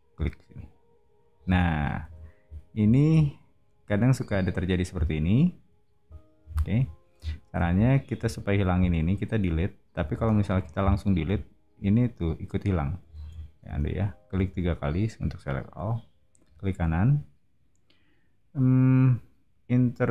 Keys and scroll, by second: 1.4 space, 2.1 o, 10.1 space, 10.4 e, 13.1 super+z, 13.6 space.